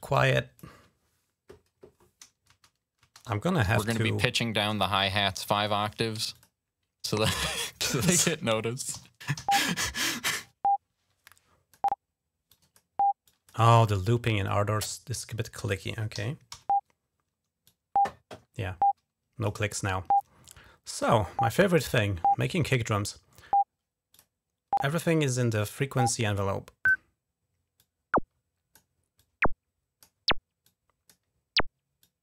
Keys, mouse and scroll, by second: 2.3 space, 2.8 space, 3.4 g, 3.8 click, 5.0 click, 5.9 typing, 6.1 click, 7.4 click, 8.7-9.1 typing, 10.1-11.8 drag, 12.3 click, 13.0 click, 13.4 typing, 14.2-15.5 drag, 15.9-17.1 typing, 17.4 click, 18.5 click, 19.3-20.0 typing, 23.9 click, 26.1 click, 26.7 click, 27.6-28.7 drag, 28.9 click, 30.4 click, 31.8-32.2 drag.